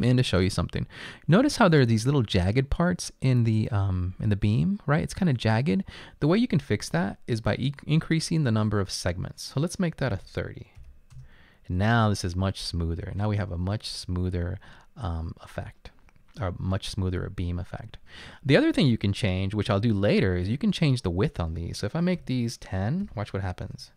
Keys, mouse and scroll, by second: 10.2-10.8 typing, 11.2 Return, 18.6 click, 22.2-23.6 typing, 23.7 Return.